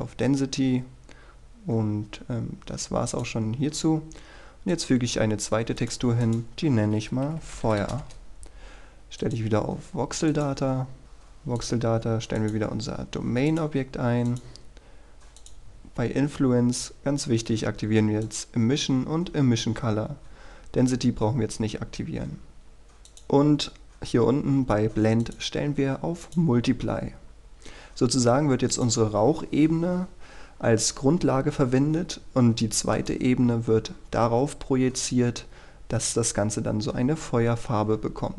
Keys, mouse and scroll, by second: 3.6-4.6 scroll up 1, 4.8 click, 7.2-8.3 typing, 9.4 click, 11.0-11.6 scroll down 1, 11.7 click, 12.0-12.5 scroll down 1, 12.5 click, 27.1-28.9 scroll up 1, 28.9-30.0 drag.